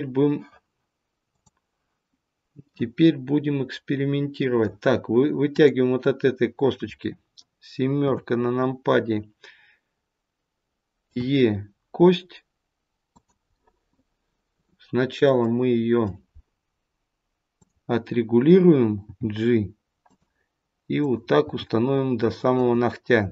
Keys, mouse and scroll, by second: 2.6 middle click, 5.5 click, 7.9 KP_7, 11.0 e, 13.5 middle click, 15.3 middle click, 17.4 click, 18.9 g, 20.8 click, 21.4 g.